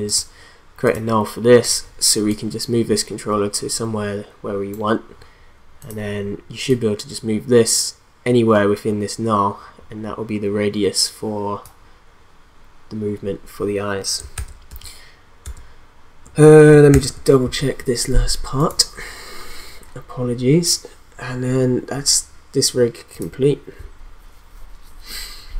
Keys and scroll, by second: 14.3 ctrl+z, 16.9 ctrl+s.